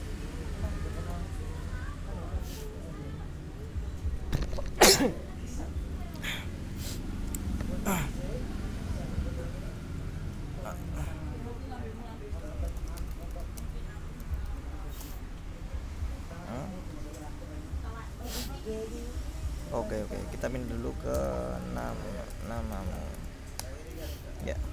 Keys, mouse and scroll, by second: 0.7 ., 1.2 Return, 10.1 Up, 11.2 BackSpace, 12.7-15.1 typing, 20.5-23.6 typing, 23.7 shift+Return, 24.6 ctrl+l.